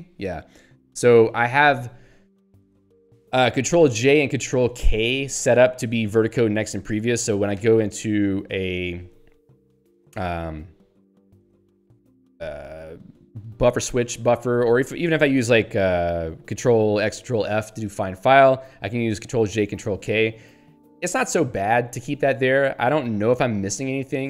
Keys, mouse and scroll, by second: 0.4 Down, 1.5 Right, 2.9 Down, 3.5 Left, 3.7 Up, 4.0 Down, 4.4 Left, 5.2 Up, 5.6 Left, 7.6 ctrl+alt+j, 14.4 ctrl+g, 15.2 ctrl+f, 18.7 ctrl+j, 20.0 ctrl+k, 22.0 ctrl+j, 22.3 ctrl+k.